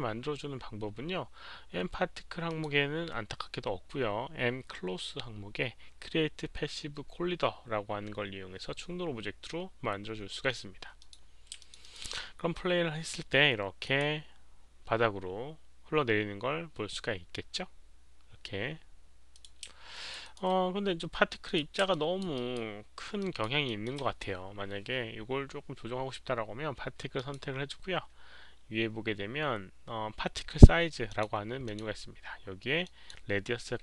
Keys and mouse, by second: 1.0 alt+click, 1.0 alt+right click, 1.0 alt+middle click, 2.5 alt+click, 2.5 alt+right click, 2.5 alt+middle click, 3.4 click, 3.4 alt+right click, 3.4 alt+middle click, 11.0 click, 11.6 alt+click, 11.8 alt+right click, 13.8 alt+click, 19.4 alt+click, 19.9 alt+click, 20.2 alt+right click, 21.4 alt+click, 21.4 alt+right click, 21.9 alt+click, 22.4 alt+right click, 23.2 alt+click, 27.1 alt+click, 27.1 alt+middle click, 27.1 alt+right click, 30.3 alt+click, 30.3 alt+middle click, 30.3 alt+right click, 31.1 click, 31.2 alt+middle click, 31.2 alt+right click, 31.6 click, 31.7 alt+middle click, 31.7 alt+right click, 32.8 alt+middle click, 32.8 alt+right click, 32.8 click.